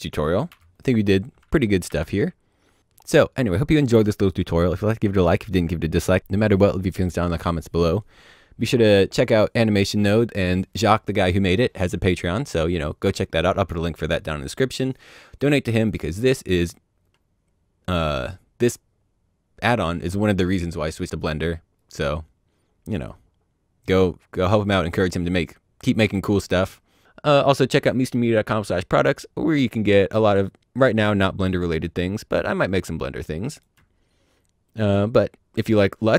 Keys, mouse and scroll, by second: 1.5 Delete, 1.8 alt+a, 2.8 click, 16.0-16.5 scroll down 1, 16.5 middle click, 20.7-21.2 scroll down 1, 21.2 middle click, 22.1-23.1 scroll up 1, 23.1 middle click.